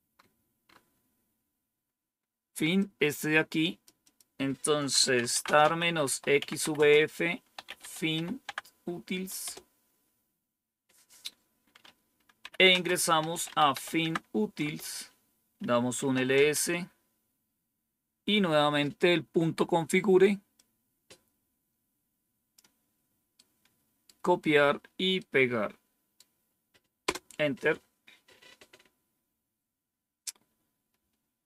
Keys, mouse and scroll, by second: 2.7-3.8 drag, 4.0 click, 4.7-9.4 typing, 12.1-14.2 typing, 14.5 Return, 15.7-16.4 typing, 20.5-22.5 drag, 23.3 right click, 25.1-26.1 right drag, 27.0 Return.